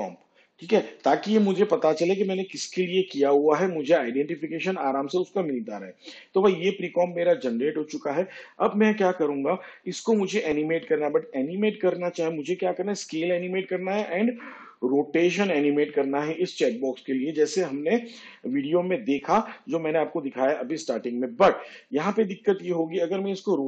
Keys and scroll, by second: 0.0-3.1 typing.